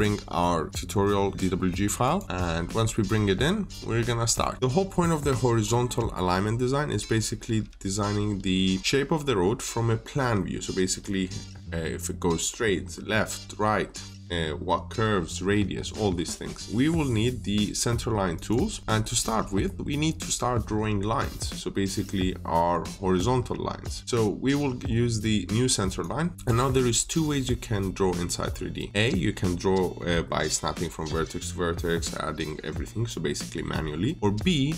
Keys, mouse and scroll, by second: 2.7 scroll down 1, 3.0 middle click, 18.2 click, 19.1 middle click, 25.7 click.